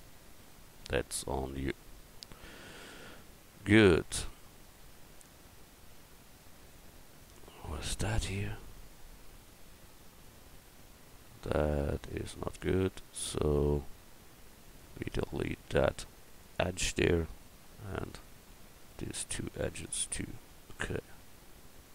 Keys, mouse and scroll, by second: 0.4 a, 7.7-9.7 right drag, 9.7 Tab, 12.7 click, 13.3-14.7 right drag, 15.6 x, 17.9-19.2 right drag, 20.7 Tab, 21.2 Tab.